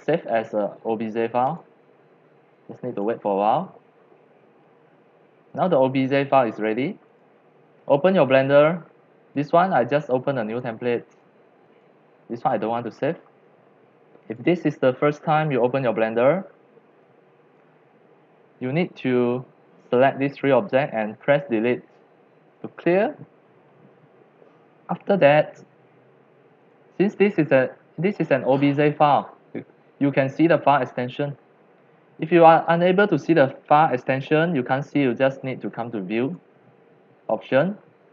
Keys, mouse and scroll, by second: 1.6 click, 2.7-5.1 drag, 7.1-9.0 drag, 9.1 click, 10.5 click, 11.1 click, 11.6 click, 12.7 click, 12.9 middle click, 14.4 click, 15.6-17.6 drag, 18.7-20.0 drag, 21.3 Delete, 22.7 scroll, 22.8 scroll down 1, 22.9 scroll down 1, 23.1 scroll, 23.1 scroll down 1, 23.2 scroll down 1, 23.3 scroll, 23.4 scroll down 1, 23.4 scroll, 23.5 scroll down 1, 23.7 scroll down 1, 23.8 scroll down 1, 23.9-24.3 scroll down 1, 26.5 middle drag, 26.7-31.8 drag, 36.2 click, 37.5 click.